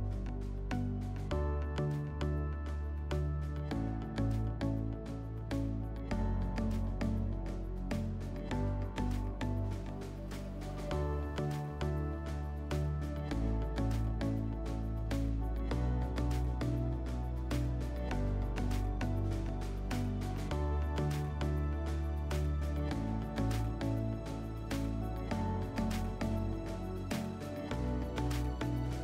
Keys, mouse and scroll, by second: 0.9 click, 1.9 right click, 3.2 click, 5.6-7.7 drag, 13.9 alt+middle click, 16.8 right click, 19.2 click, 21.1 alt+w, 23.2 alt+middle click, 25.2 alt+middle click.